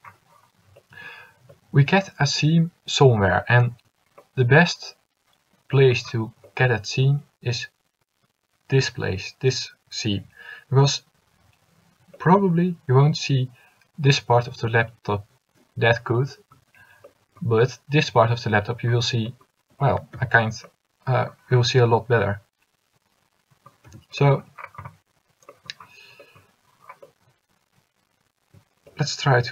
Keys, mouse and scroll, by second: 20.3 Tab, 21.6 middle click, 24.0 Tab.